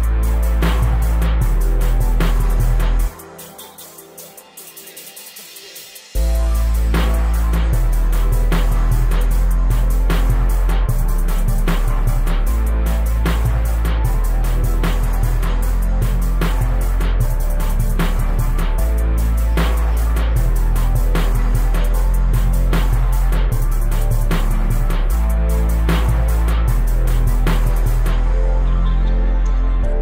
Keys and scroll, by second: 0.5 shift+Right, 1.1 shift+Left, 3.0 space, 4.1 o, 8.8 r, 13.5-18.8 typing, 20.7 space, 23.1 s, 29.3 space.